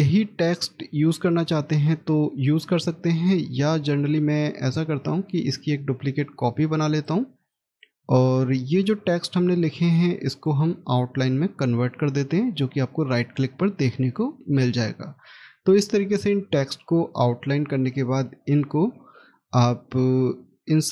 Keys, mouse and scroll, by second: 5.7 scroll down 1, 7.5 shift+right click, 8.0-10.1 shift+scroll up 2, 10.1 right click, 17.6 right click.